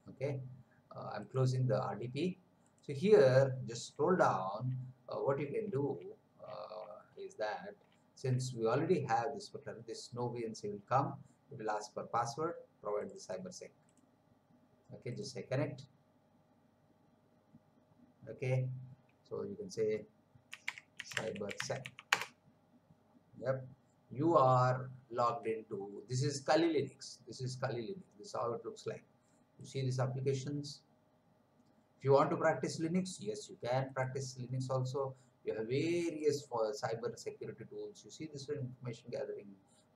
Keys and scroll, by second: 20.2-22.3 typing.